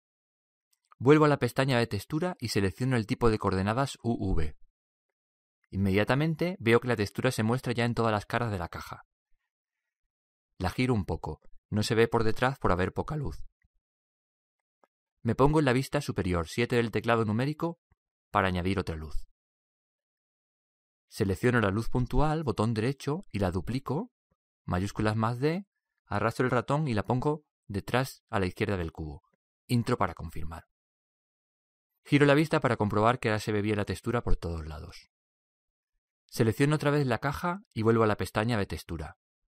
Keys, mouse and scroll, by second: 2.1-4.5 drag, 5.3-7.3 drag, 7.3-9.2 middle drag, 10.6-13.8 middle drag, 16.6 KP_7, 17.5-19.7 middle drag, 22.1-23.9 right drag, 25.3 shift+d, 32.6-34.2 middle drag, 36.7-39.1 drag, 37.8 middle click, 39.1-39.6 middle drag.